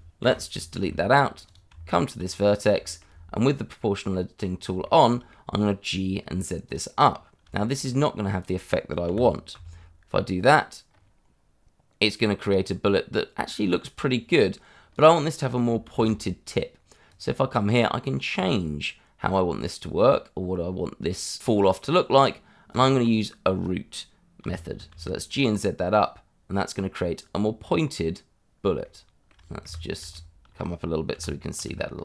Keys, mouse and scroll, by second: 0.2 Delete, 0.9 shift+middle click, 1.2 scroll up 1, 1.4 click, 1.7 Tab, 2.4 scroll up 1, 2.8 shift+middle click, 3.8 middle click, 4.5 scroll down 1, 4.8 shift+middle click, 5.3 middle click, 6.6 click, 7.0 scroll down 1, 7.5 shift+middle click, 7.8 scroll up 1, 9.0 g, 9.5 z, 10.3 scroll up 1, 14.9 click, 15.9 ctrl+z, 17.1 click, 22.7 click, 24.4 g, 24.9 z, 28.8 shift+middle click, 29.0 shift+middle click, 29.6 Escape, 30.1 shift+middle click, 30.2 middle click, 30.4 shift+middle click, 31.1 g, 31.5 z.